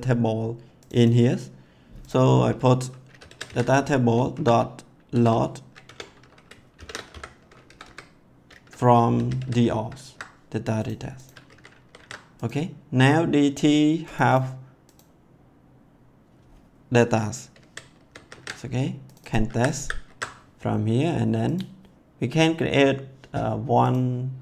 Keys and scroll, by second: 3.0-7.1 typing, 5.8 Tab, 7.6 Left, 8.9-9.9 typing, 11.4 ctrl+s, 17.5 ctrl+x, 17.9 ctrl+s, 19.4 ctrl+c, 20.0 ctrl+s.